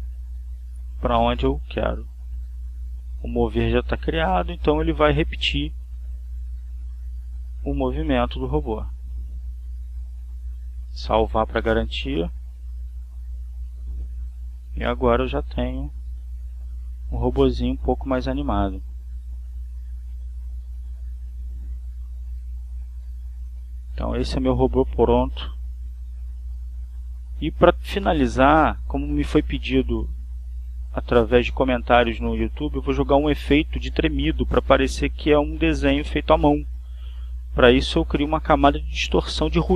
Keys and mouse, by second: 2.3 Right, 4.7-10.5 drag, 11.0 click, 12.1 click, 15.0 click, 17.8 click, 18.8 click, 19.5 click, 22.0-23.2 drag, 27.0 click, 28.9 click, 32.0 click, 33.5 click, 34.0 right click, 38.1 click.